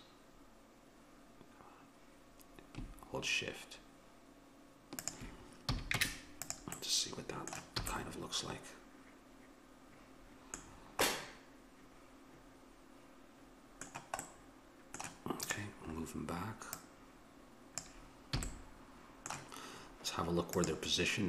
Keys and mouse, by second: 5.7 a, 6.0 Tab, 7.8 a, 15.5-18.6 drag, 18.4 a, 19.0-20.1 middle drag.